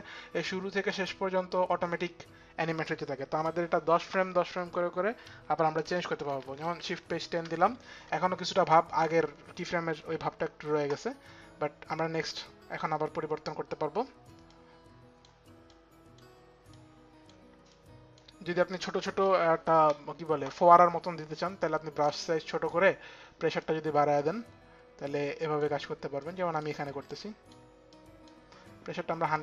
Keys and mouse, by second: 6.4 shift+Page_Down, 14.0 click, 15.2 click, 16.3 click, 17.3 click, 21.6 click, 23.2 click, 24.7 click, 26.6 click, 27.5 click, 28.9 click.